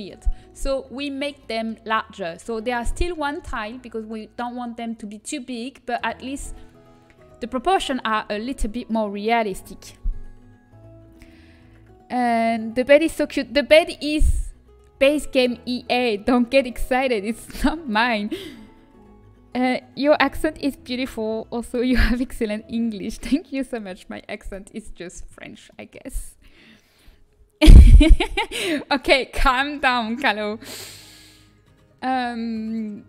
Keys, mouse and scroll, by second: 0.5-2.8 middle drag, 2.8 KP_7, 24.4-28.0 middle drag.